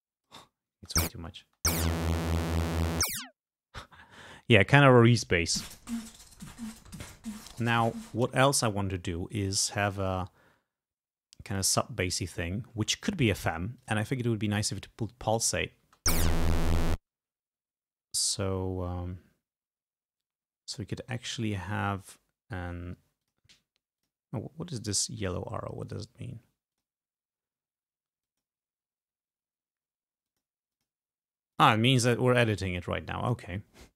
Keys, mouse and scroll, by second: 0.8 space, 3.4 space, 8.2 click, 10.1 click, 11.6 click, 12.3 click, 13.8 click, 15.9 space, 17.2 space, 23.3 click, 24.1 click, 24.8 right click, 26.8 click, 28.3 click, 30.3 click, 30.8 click, 31.6 click, 32.0 click.